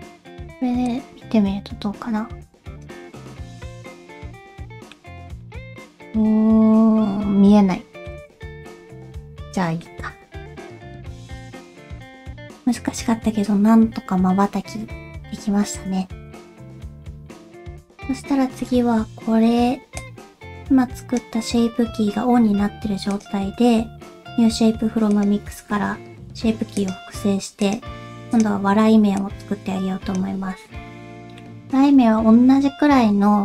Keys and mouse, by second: 1.0-2.9 drag, 3.7-5.1 ctrl+middle drag, 5.6 shift+middle click, 6.2-8.1 ctrl+middle drag, 8.4 shift+middle click, 9.5 ctrl+middle click, 10.5-17.4 drag, 20.1-21.3 drag, 23.2-25.3 drag, 26.8 click, 27.7 click, 29.3 click, 31.1 middle click.